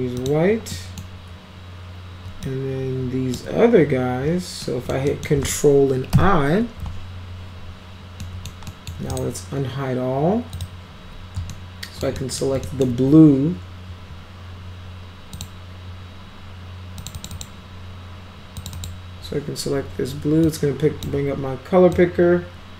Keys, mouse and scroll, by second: 0.2 click, 0.7 middle click, 2.5-3.4 shift+drag, 4.6 middle drag, 5.1 middle click, 6.1 ctrl+i, 8.2 alt+middle click, 8.7 alt+middle drag, 9.1 right click, 10.6 click, 11.5 alt+middle click, 12.2 middle drag, 12.6 alt+middle drag, 15.4 click, 17.0 click, 17.2 click, 17.3 click, 18.6 click, 18.8 click, 20.4 click, 22.0 click.